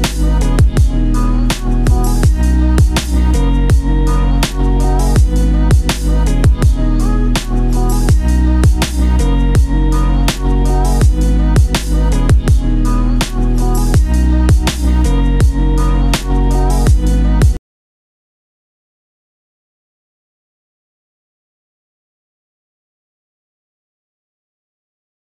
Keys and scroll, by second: 3.9 ctrl+z, 9.3 ctrl+c, 9.4 ctrl+v, 13.6 ctrl+g, 15.9 ctrl+z.